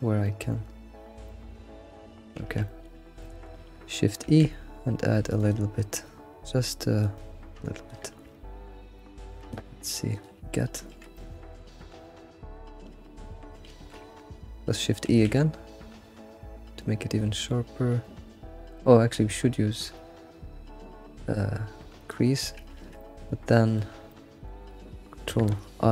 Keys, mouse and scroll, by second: 2.4 scroll up 4, 2.6-4.2 middle drag, 2.6 scroll, 4.2 shift+e, 7.2-8.3 drag, 8.3 Tab, 8.6 scroll, 9.0-10.2 middle drag, 10.2 click, 10.9 alt+shift+z, 11.1-11.7 middle drag, 11.7 alt+shift+z, 12.1-12.9 scroll up 2, 13.7 alt+shift+z, 15.0 shift+e, 22.0 click, 22.4-22.7 scroll down 2, 22.8 alt+shift+z, 23.0-25.9 middle drag, 23.4 alt+shift+z.